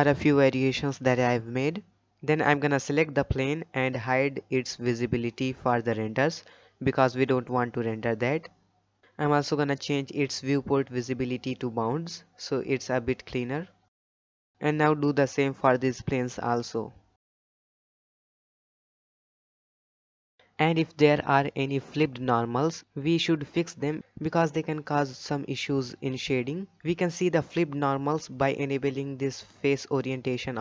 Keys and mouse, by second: 1.8 click, 3.9 click, 4.9 click, 6.4 click, 7.1-7.7 middle drag, 7.9 shift+middle drag, 11.9-12.8 drag, 14.0 click, 15.3-16.3 drag, 18.1 click, 19.0 click, 19.5 click, 20.9 alt+a, 28.7 middle drag, 29.9-30.6 drag.